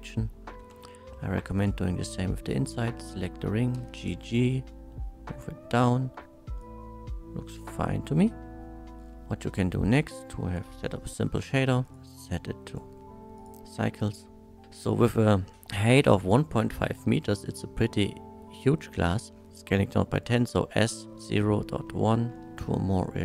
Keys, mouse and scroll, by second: 0.7 Tab, 0.9 middle drag, 1.6 click, 3.7 g, 4.0 g, 6.6 shift+click, 6.6-7.9 shift+middle drag, 8.1-8.8 middle drag, 9.0 scroll down 1, 9.1-10.5 middle drag, 10.9 shift+middle drag, 11.8 shift+click, 12.2 shift+click, 12.7 click, 13.4 click, 14.6 ctrl+z, 17.8-19.2 middle drag, 21.2 KP_0, 21.2 KP_Decimal, 21.4 KP_0, 21.7 KP_1, 22.5 middle click.